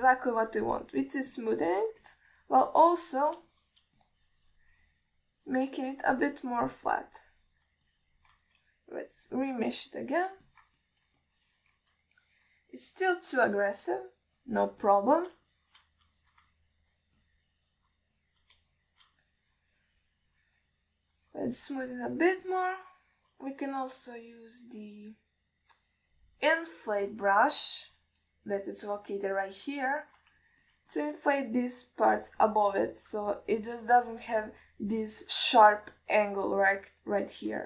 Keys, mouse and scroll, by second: 0.3 alt+middle click, 1.1 click, 2.2 alt+middle drag, 2.6 click, 3.3-3.8 alt+middle drag, 3.9-4.5 drag, 4.7-5.1 shift+middle drag, 5.3-6.0 drag, 6.2 middle drag, 6.7 click, 7.6 middle drag, 8.2-8.9 drag, 9.2 alt+middle click, 10.3-11.5 drag, 11.7 ctrl+middle click, 12.1 middle drag, 12.5-13.0 ctrl+alt+middle drag, 13.4 shift+middle drag, 15.1 f, 16.1 ctrl+alt+middle drag, 16.8-17.2 shift+middle drag, 17.4 ctrl+alt+middle click, 17.8-18.2 alt+middle drag, 18.5-19.1 drag, 19.4 middle drag, 20.0 alt+shift+middle drag, 20.5 middle drag, 21.1 click, 22.0 middle click, 22.8 click, 23.4 middle click, 23.7 ctrl+alt+middle click, 24.4 alt+middle click, 27.7 click, 28.9 ctrl+alt+middle click, 31.2 alt+middle click, 31.7 f, 32.2-33.5 drag, 33.7 alt+middle click, 34.6-35.2 drag, 35.4 middle click.